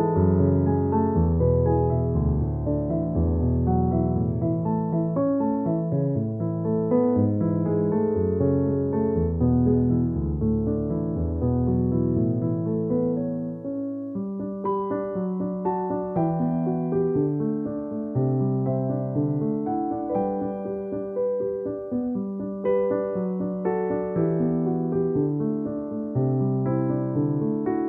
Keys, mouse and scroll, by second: 0.6 alt+click, 1.3 alt+click, 2.7 alt+click, 6.6 alt+click, 6.8 alt+click, 9.3 alt+click, 9.5 alt+click, 11.5 alt+click, 13.1 space, 13.2 click, 13.4 space, 14.6 alt+click, 18.9 space, 19.1 click, 19.2 space, 19.7 alt+click, 21.7 space, 21.9 click, 22.0 space, 22.5 alt+click, 23.4 alt+click, 24.4 alt+click, 25.6 alt+click, 26.9 alt+click, 27.7 alt+click.